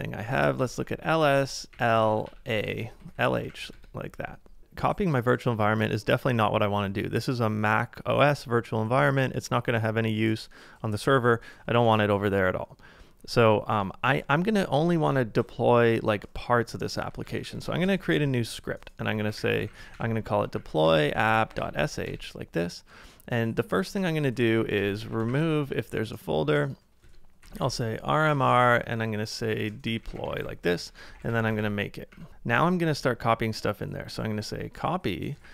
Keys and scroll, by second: 0.0-2.8 typing, 17.5 typing, 18.9-22.3 typing, 24.2-24.9 typing, 27.0-30.9 typing, 32.0-32.8 typing, 33.8-35.5 typing.